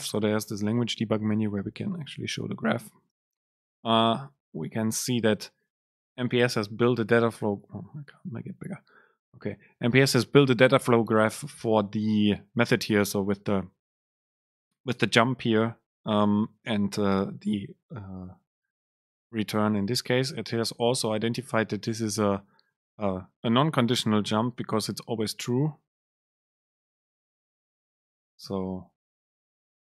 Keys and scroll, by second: 29.5 Right.